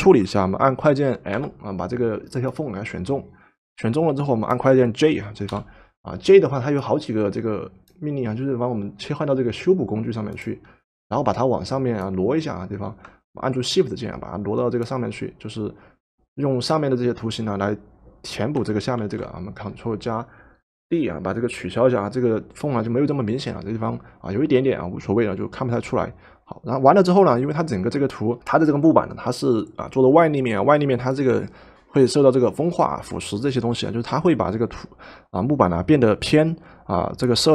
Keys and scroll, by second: 1.4 m, 5.5 j, 19.0 ctrl+d.